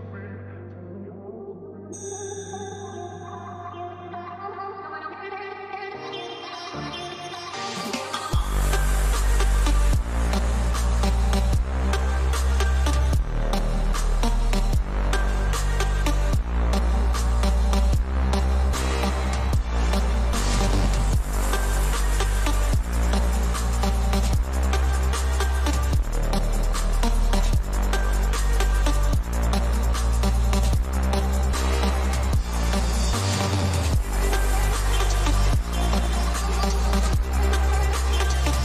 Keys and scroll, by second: 32.9 ctrl+=.